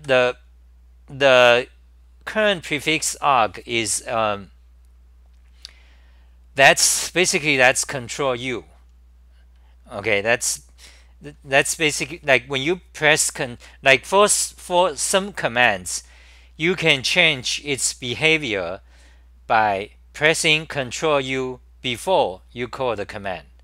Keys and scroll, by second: 0.0-0.5 typing.